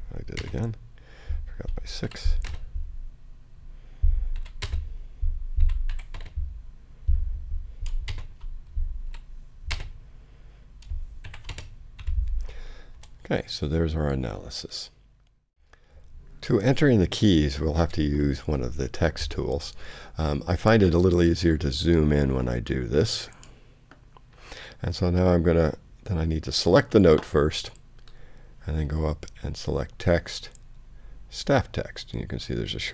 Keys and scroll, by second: 0.4 shift+space, 2.0 shift+6, 2.4 space, 4.3-6.1 typing, 8.1 shift+space, 9.0 shift+6, 9.7 space, 11.2 shift+v, 11.5 shift+space, 12.0 i, 12.9 Return.